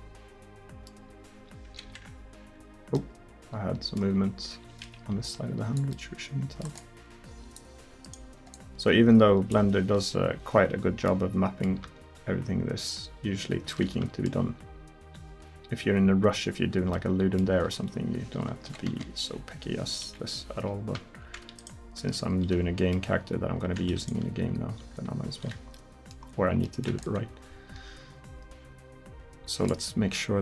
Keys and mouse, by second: 1.9 ctrl+z, 4.2 r, 6.4-8.1 drag, 9.9 click, 10.1 KP_1, 11.1 middle drag, 11.4 middle drag, 11.9 r, 13.8 middle drag, 14.5 r, 18.7 KP_1, 18.9 KP_7, 20.1 KP_1, 21.6-22.4 right drag, 22.0 r, 24.3 r, 27.1-29.7 drag, 30.1-30.4 drag.